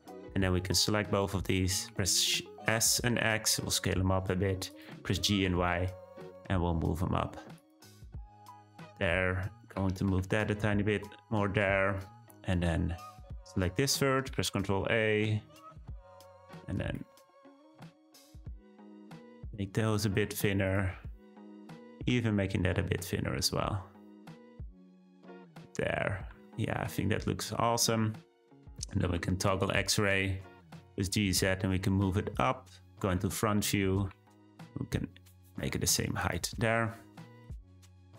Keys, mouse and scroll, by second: 0.0-0.8 scroll up 2, 0.8 shift+click, 1.9 s, 5.0 g, 8.1-8.9 scroll down 1, 8.9 click, 9.8 g, 13.1 click, 14.3 ctrl+a, 16.8 click, 17.4 shift+click, 18.0 shift+click, 18.8 ctrl+a, 21.4 click, 22.0 ctrl+a, 25.2-26.3 scroll down 2, 26.3 Tab, 26.8-29.0 middle drag, 29.0 z, 30.6 g, 32.5 `, 33.6-34.0 scroll up 2, 34.0 g, 36.6-37.6 middle drag, 37.6-38.1 scroll down 3.